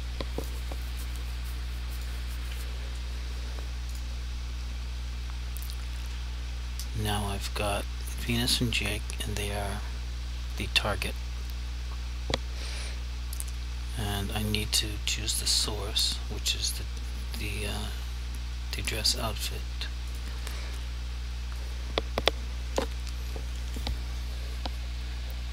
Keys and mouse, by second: 0.5 click, 14.8 click, 20.2 click, 21.7 click.